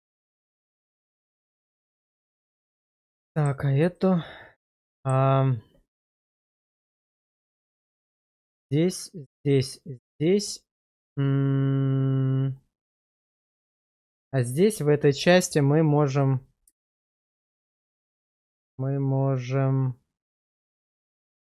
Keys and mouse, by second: 2.4-2.8 middle drag, 3.3 shift+middle drag, 4.0-4.8 middle drag, 4.9 shift+middle click, 6.4-6.9 middle drag, 7.1 shift+middle click, 8.1 middle click, 12.6-13.0 middle drag, 13.2 shift+middle click, 14.0 shift+middle drag, 16.8 shift+middle drag, 17.3-21.5 middle drag.